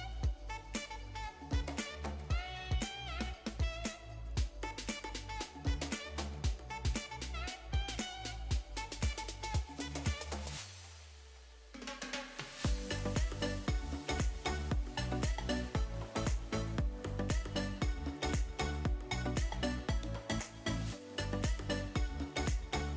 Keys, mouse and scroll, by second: 0.8-1.6 middle drag, 3.6 click, 6.3 click, 7.5-12.8 drag, 15.4-15.8 middle drag, 20.1-21.4 drag, 22.3-22.9 middle drag.